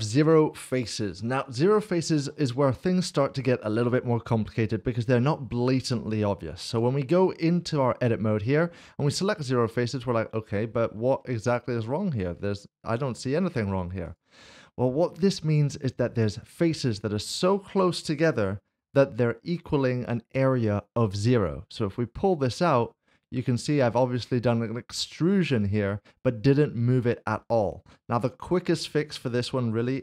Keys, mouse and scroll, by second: 6.7 Tab, 9.2 click, 10.0 click, 10.2 middle click, 11.1 scroll up 1, 11.5 middle click, 13.3 scroll down 1, 14.1 click, 14.4 scroll down 1, 16.6 scroll down 1, 16.8 scroll up 1, 17.9 click, 21.0 g, 24.2 click, 24.7 middle click, 28.2 ctrl+z, 29.0 middle click.